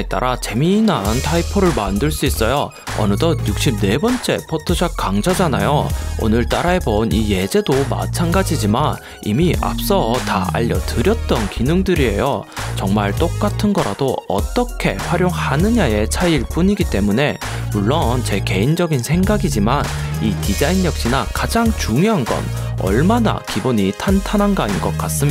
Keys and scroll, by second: 3.6 super+space, 3.8-5.6 typing, 6.1 super+Return, 8.0 shift+Down, 8.8 shift+Up, 19.5-21.2 typing.